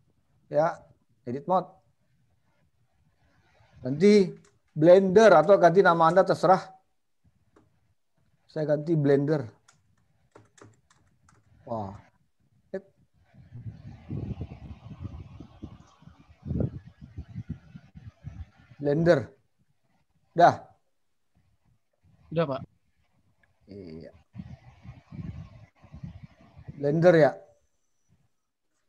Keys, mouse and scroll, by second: 1.0-2.2 scroll up 5, 2.2-3.6 scroll up 2, 4.6 BackSpace, 5.0 BackSpace, 5.4 BackSpace, 6.2 BackSpace, 8.6 shift+b, 9.7-11.4 typing, 14.6-17.8 typing, 19.7-20.4 scroll down 4, 21.6-22.2 scroll down 2, 22.1-22.8 scroll up 4, 23.0 scroll up 2, 23.4-24.4 scroll down 5.